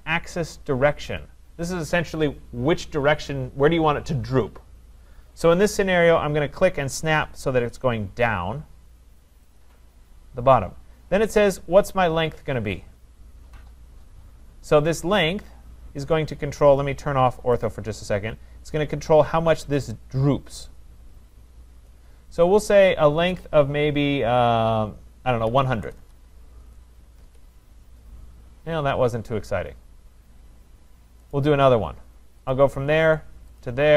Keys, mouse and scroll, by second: 9.6-14.7 drag, 17.7-22.7 drag, 25.5-25.9 typing, 27.2 Return, 31.4-32.5 right drag, 32.5-33.9 drag.